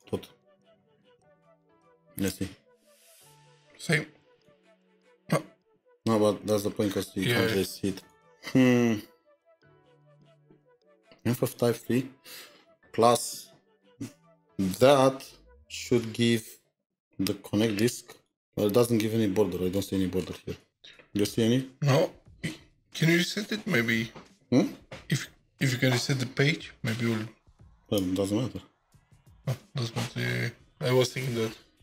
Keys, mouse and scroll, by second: 0.0-0.2 typing, 1.3-2.8 typing, 18.3-19.0 scroll down 5, 19.0-19.6 scroll down 3, 19.7-22.8 scroll up 5.